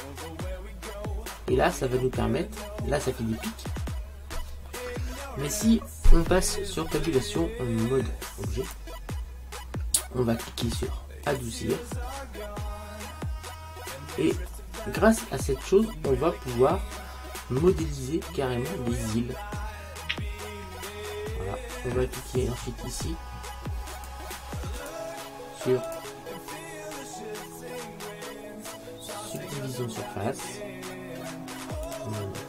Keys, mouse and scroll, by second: 4.0 middle click, 4.7 scroll down 1, 4.9-6.6 middle drag, 7.0 Tab, 11.3 click, 12.4-14.1 middle drag, 15.1-15.7 scroll up 1, 15.7-17.5 middle drag, 24.0-27.7 drag, 31.9-32.4 drag.